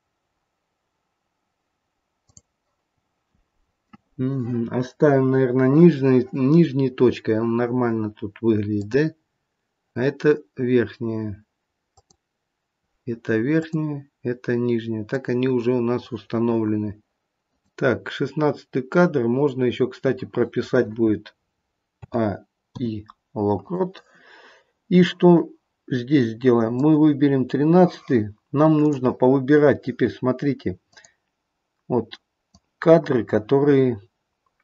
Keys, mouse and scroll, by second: 2.2 click, 8.7 click, 13.5 click, 15.1 click, 17.5 click, 21.9 a, 22.7 i, 26.7 click, 28.9 click, 29.3-29.9 scroll up 1, 30.9 click, 32.6 click.